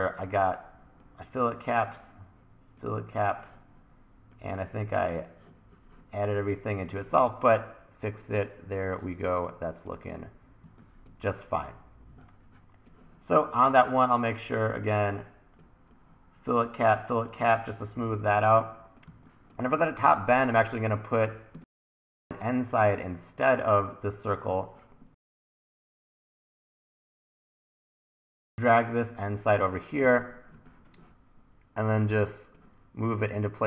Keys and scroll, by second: 10.6 1, 19.1 1, 25.8 super+z, 30.1 e, 30.6 1.